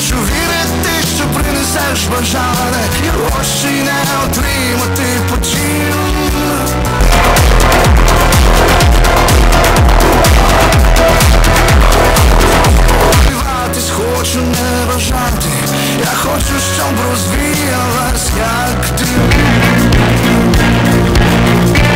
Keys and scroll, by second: 13.3 Page_Down.